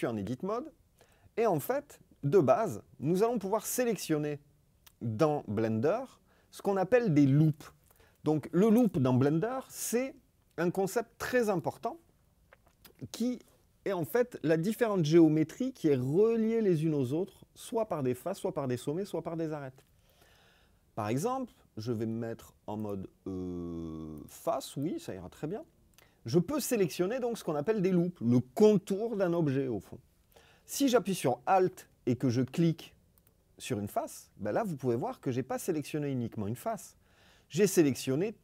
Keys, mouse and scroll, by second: 22.7 click, 24.2 click, 24.7 click, 33.1 alt+click.